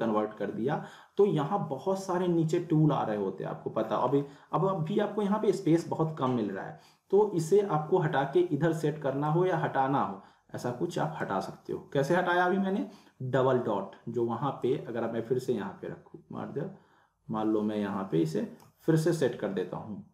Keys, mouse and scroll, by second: 3.0 click, 3.1 scroll down 1, 3.2 scroll up 1, 3.5-4.0 scroll down 2, 5.8 scroll up 1, 6.6-7.4 scroll up 1, 9.3-11.4 drag, 14.6-17.4 drag.